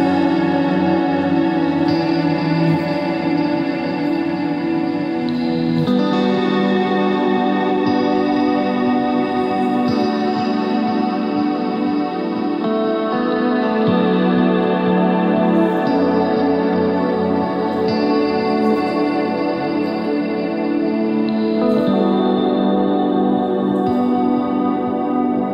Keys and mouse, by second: 2.7 s, 9.2 z, 10.5 z, 10.7 z, 11.2 c, 13.4 z, 16.1 e, 17.9 ctrl+z, 18.4 e, 19.8 s, 22.1-23.4 middle drag, 24.0 s, 24.9 s.